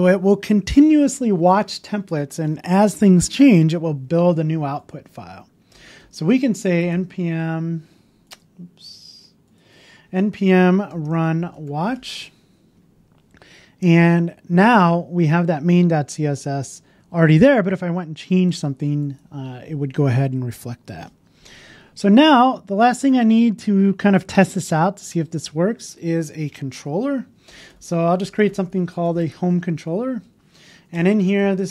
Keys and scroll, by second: 10.7 BackSpace, 30.7 Up, 31.2 shift+2.